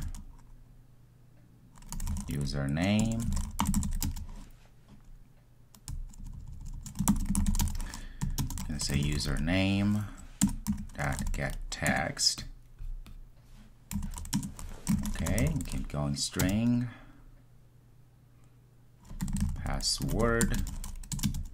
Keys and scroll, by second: 10.5 Return.